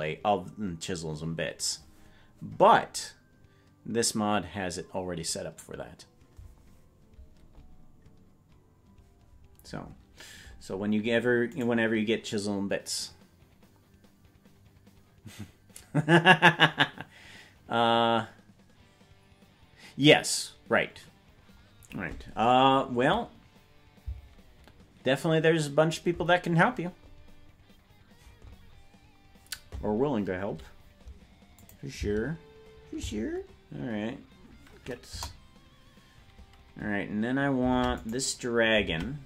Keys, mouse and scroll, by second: 11.7 right click, 31.7 click, 33.1 space, 35.1 KP_0, 37.8 ctrl+Tab, 38.1 right click, 38.9 ctrl+Tab.